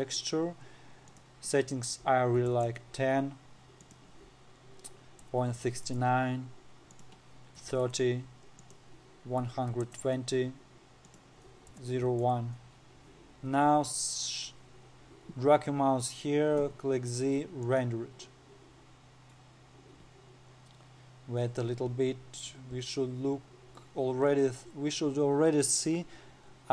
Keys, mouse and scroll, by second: 0.4-15.5 drag, 17.1 z, 25.1-25.6 scroll down 4, 26.4-26.7 scroll down 2.